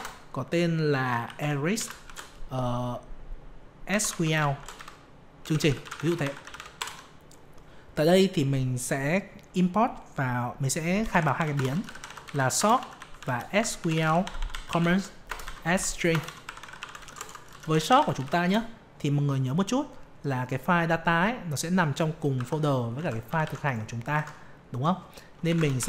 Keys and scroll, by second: 22.3 F2, 22.9 ctrl+a, 23.2 ctrl+c, 24.1 alt+Tab.